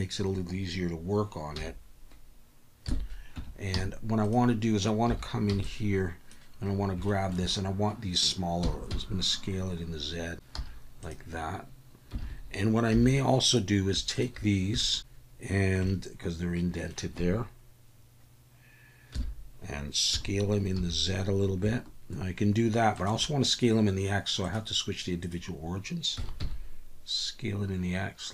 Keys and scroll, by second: 1.6 /, 2.8 KP_1, 3.3 Tab, 3.7 z, 5.1 1, 5.5 b, 8.9 s, 8.9 z, 10.5 z, 12.2 alt+a, 12.9 3, 19.1 KP_1, 20.1 s, 20.8 z, 26.1 s, 26.4 x.